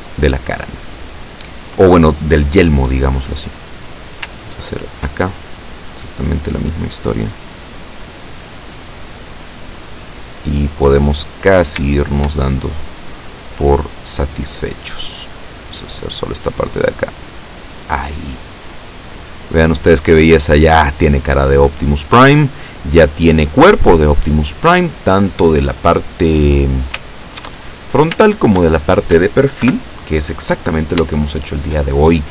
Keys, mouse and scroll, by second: 4.0 right click, 4.6 shift+right click, 5.7-8.2 drag, 8.3-8.7 scroll down 2, 8.7-10.1 middle drag, 10.1-11.3 middle drag, 11.5 right click, 12.1 shift+right click, 12.5 shift+middle click, 13.9-15.0 drag, 15.6 right click, 16.1-17.9 drag, 18.0-19.1 middle drag, 19.2-20.3 middle drag, 20.5 scroll down 1, 20.9 middle click, 22.0-23.0 middle drag, 23.2 scroll down 2, 23.7-25.4 middle drag, 25.5 scroll down 2, 25.9 middle click, 26.7-27.2 scroll up 4, 27.2 shift+middle click, 27.8 shift+scroll up 1, 28.5 shift+middle click, 29.7 KP_7, 30.2 scroll up 1, 30.7-31.1 scroll down 2, 31.3 shift+middle click, 32.1-32.3 shift+scroll up 3.